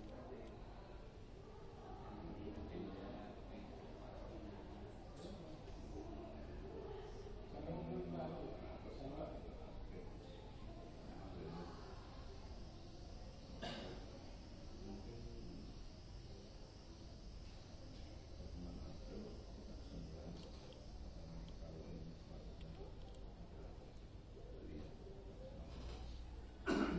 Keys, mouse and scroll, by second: 21.6-23.4 middle drag, 25.1-26.9 middle drag.